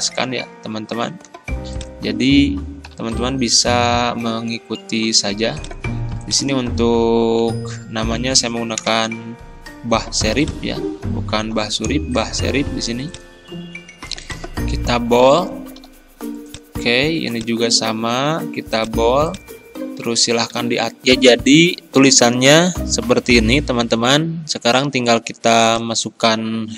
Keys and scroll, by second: 1.1 ctrl+b, 2.9 ctrl+], 7.0 b, 8.8 Return, 11.5 Delete, 15.9 ctrl+b, 18.4 ctrl+b, 20.5 ctrl+a.